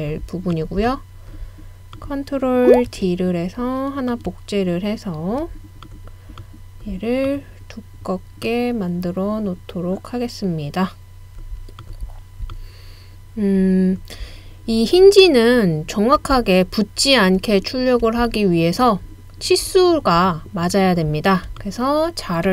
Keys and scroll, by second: 2.9 super+d.